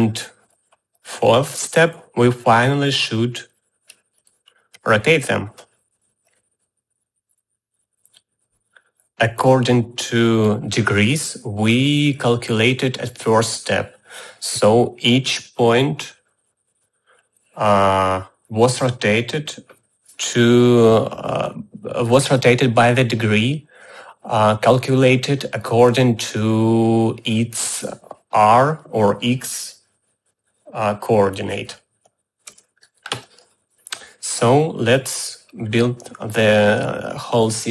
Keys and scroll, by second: 33.0 u.